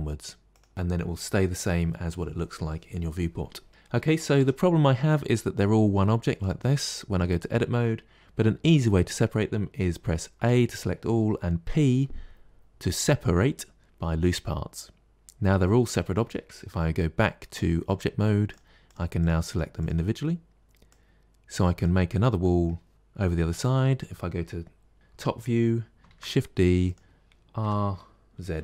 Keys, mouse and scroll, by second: 0.4 click, 3.7-4.2 middle drag, 4.2 Tab, 4.7 shift+middle click, 5.3-5.9 scroll up 1, 5.9-8.9 shift+middle drag, 10.3 a, 11.5 p, 15.1-15.5 scroll down 2, 15.5-17.7 middle drag, 17.7 Tab, 18.4 click, 19.1 click, 19.3 click, 19.7 click, 20.1-20.6 middle drag, 20.7 click, 22.3-23.4 middle drag, 23.4 KP_7, 26.0 shift+d, 27.5 r.